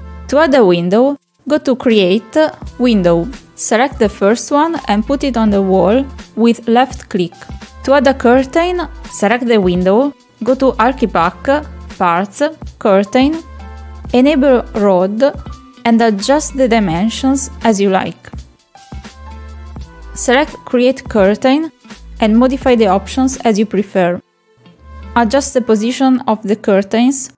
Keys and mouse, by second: 1.8 middle click, 1.9 shift+middle click, 2.2 middle drag, 3.6 click, 6.0 Escape, 6.3 click, 8.8 click, 9.2 click, 12.3 click, 13.6 click, 15.2 click, 15.9 middle click, 16.8 click, 17.9 click, 19.7 click, 20.5 middle click, 21.7-23.9 drag, 24.8 shift+middle click, 25.4 shift+middle click, 25.6 click, 25.8 shift+click, 26.1-27.2 drag.